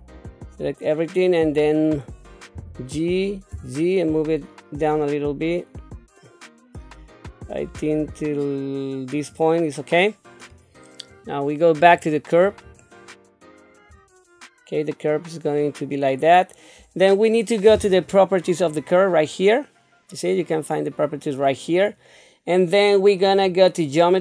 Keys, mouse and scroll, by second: 2.5 g, 11.1 click, 11.8 click, 12.8 shift+middle click, 18.6 click, 23.3 click.